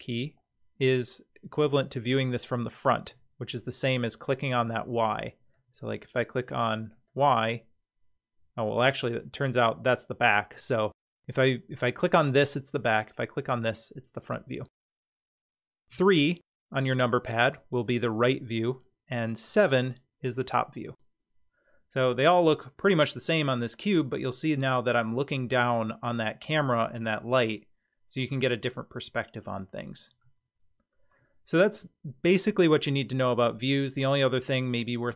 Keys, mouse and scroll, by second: 5.2 middle click, 6.9 click, 9.7 middle click, 13.4 click, 15.9 KP_3, 19.3 KP_7, 27.5-30.2 middle drag.